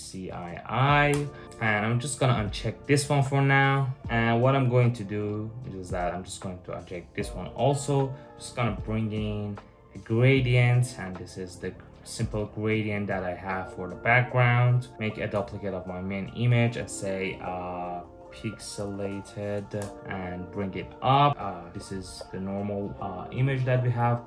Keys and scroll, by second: 0.0-0.5 typing, 0.7 Return, 8.3 super+v, 14.9 super+j, 17.4-19.7 typing.